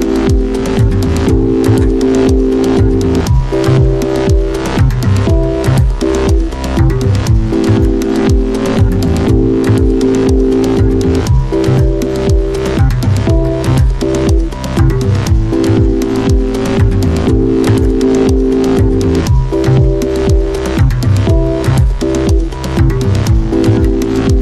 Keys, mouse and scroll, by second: 0.6 ctrl+z, 3.2-7.1 drag, 11.8 click, 17.3 click, 20.6-24.4 drag.